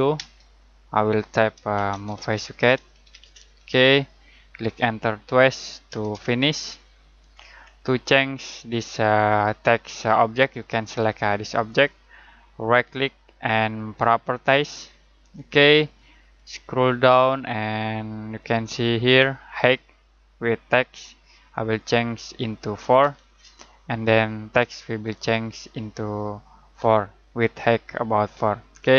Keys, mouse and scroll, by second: 1.7-3.7 typing, 5.9 Return, 6.7 middle click, 7.3 scroll up 1, 8.3 middle click, 11.0 click, 12.7 right click, 14.6 click, 21.5 click, 23.9 click, 25.6 scroll down 1, 26.2 middle click.